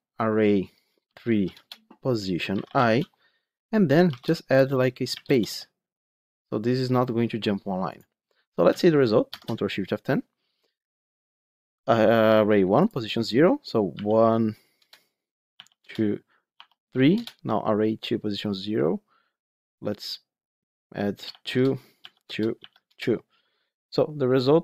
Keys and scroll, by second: 1.5 Return, 9.2 ctrl+shift+F10.